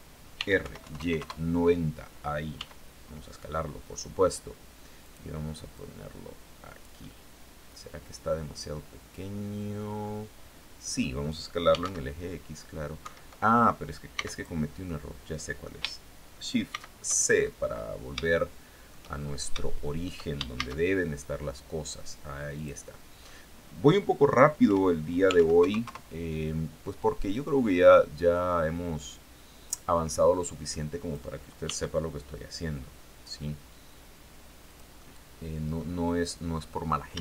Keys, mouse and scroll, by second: 0.0-0.5 typing, 0.6 KP_Enter, 2.0 s, 4.5 click, 5.2-10.6 drag, 6.4-10.6 right drag, 10.9-11.8 typing, 12.5 Escape, 13.6 x, 13.8 click, 14.3 click, 14.3 right click, 16.1 shift+c, 16.8-17.4 shift+scroll up 5, 17.6 shift+click, 18.6-19.3 shift+scroll up 3, 19.0 shift+middle click, 20.0 shift+a, 22.0 click, 22.6-22.9 scroll down 1, 24.1 r, 24.8 KP_9, 25.0 KP_0, 25.3 KP_Enter, 27.8-29.3 drag, 29.9 click, 31.1 s, 34.1 click, 34.4-35.4 middle drag, 35.5-36.2 scroll down 4, 36.6 shift+middle click.